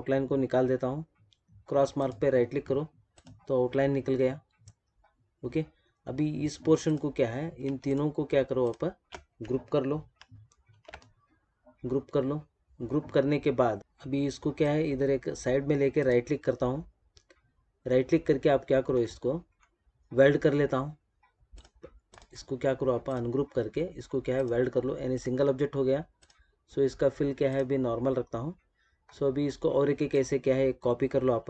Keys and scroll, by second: 10.6 ctrl+g.